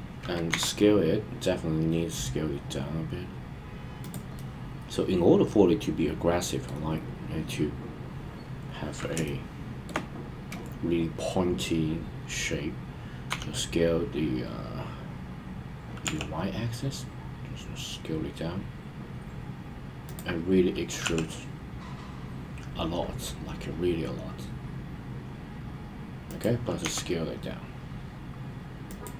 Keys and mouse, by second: 0.5 s, 4.0 click, 4.3-6.7 middle drag, 9.2-9.8 shift+middle drag, 13.3 s, 16.0 y, 20.0 click, 21.0 e, 26.2 click, 26.8 s, 28.8 click.